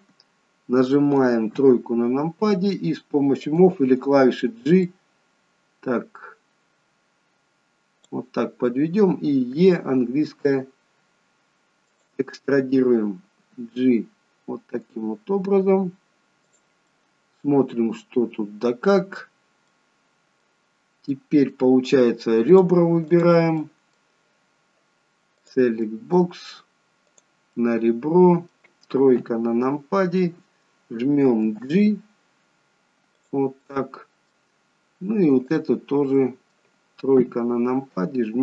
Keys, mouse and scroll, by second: 1.5 KP_3, 3.5 click, 4.9 click, 13.5 g, 16.9 middle click, 19.3-19.7 scroll up 1, 19.7 middle click, 21.2 middle click, 22.6 click, 23.2 click, 23.7 middle click, 25.5 click, 25.9 middle click, 27.2 click, 27.6 middle click, 29.3 KP_3, 31.5 g, 33.7 middle click, 35.5 click, 36.3 middle click, 37.3 KP_3.